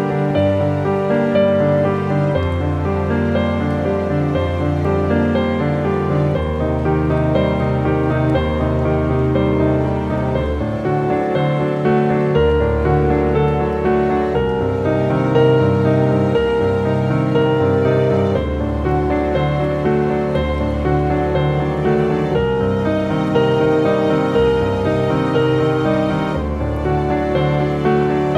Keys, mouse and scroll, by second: 0.6 shift+s, 1.7 shift+s, 2.1 shift+a, 3.2 shift+w, 5.5-8.0 typing, 9.3 click, 13.9 click, 15.3 scroll up 1, 17.4 click, 19.1 ctrl+a, 20.2 shift+s, 21.1 shift+h, 22.4 shift+a, 23.2 shift+w, 24.3-27.2 typing.